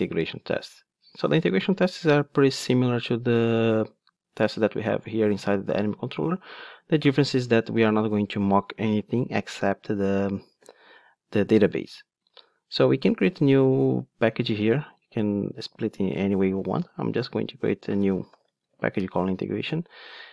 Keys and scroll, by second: 13.3 super+n.